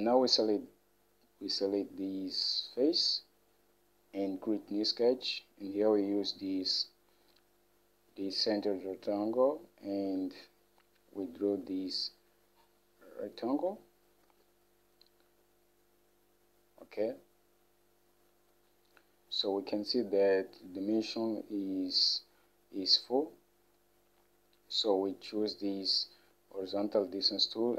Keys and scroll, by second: 14.4 Escape.